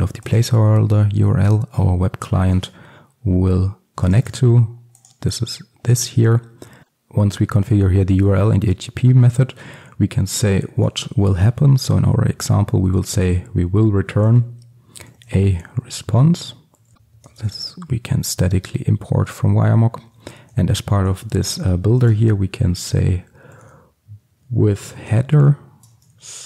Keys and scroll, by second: 2.6 alt+1, 9.7 Tab, 11.9 Tab, 17.5 alt+Return, 26.0 Return.